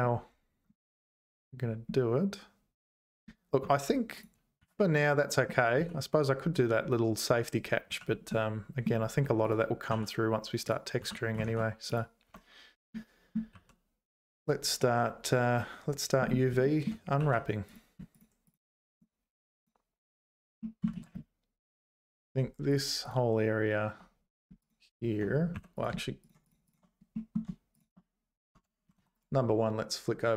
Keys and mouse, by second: 3.6 Tab, 4.6 z, 5.8 z, 7.8 z, 8.5 middle click, 9.9 h, 10.6 click, 11.0 h, 11.4 ctrl+s, 11.9 click, 12.3 Tab, 12.9 middle click, 13.5 2, 16.6 shift+middle click, 17.2 2, 17.7 click, 18.9 click, 19.6 click, 20.6 middle click, 20.9 ctrl+z, 22.7 shift+click, 23.0 shift+click, 24.6 shift+click, 25.5 3, 25.7 click, 27.1 middle click, 28.5 Tab, 28.9 ctrl+s, 29.1 click.